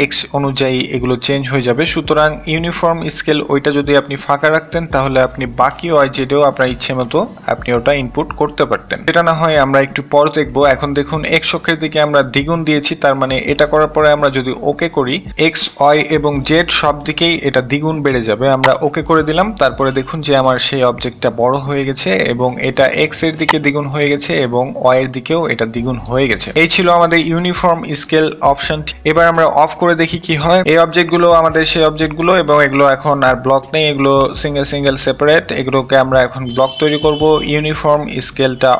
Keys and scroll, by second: 37.5 typing, 37.8 Return.